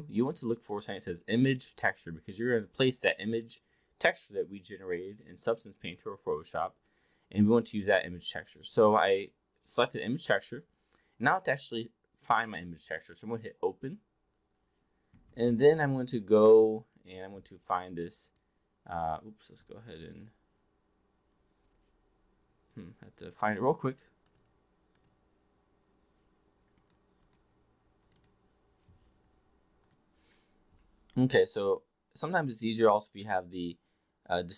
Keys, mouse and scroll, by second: 13.8 click.